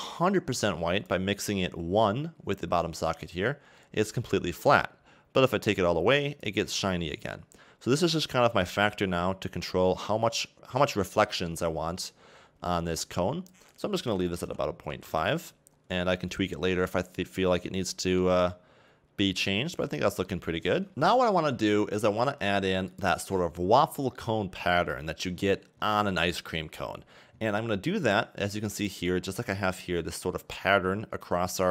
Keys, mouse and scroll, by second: 0.1 click, 3.8 middle click, 5.4 click, 8.1 click, 15.1 click, 15.8 scroll down 1, 16.1 middle click, 17.2-17.7 scroll down 1, 17.7 middle click, 19.5 middle click, 20.9 middle click, 25.4-25.9 scroll down 2, 25.9 middle click.